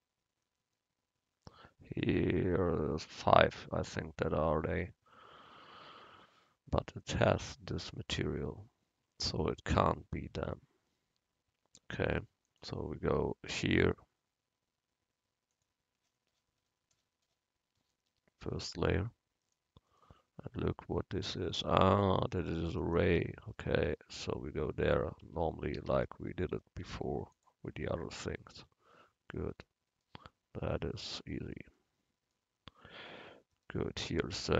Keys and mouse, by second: 5.5-10.6 middle drag, 12.5-15.4 drag, 19.6-22.0 right drag, 25.3 Tab, 25.9 a, 26.1 a, 26.9 u, 28.7 Tab, 33.7 right click.